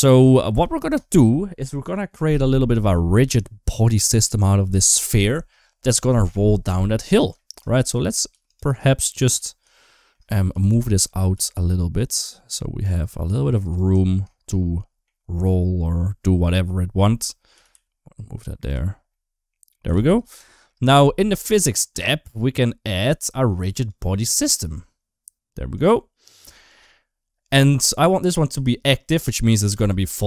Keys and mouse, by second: 0.1 shift+middle click, 6.8 click, 7.2 shift+middle click, 7.5 middle click, 7.7 Tab, 8.1 2, 8.3 click, 8.5 click, 9.6 shift+middle click, 10.6 g, 13.7 Tab, 14.1 shift+middle click, 14.4 middle click, 15.3 middle click, 16.1 middle click, 17.0 click, 17.4 g, 18.9 middle click, 19.7 g, 20.3 shift+middle click, 21.7 click, 23.6 click, 25.6-26.6 drag, 29.6 space.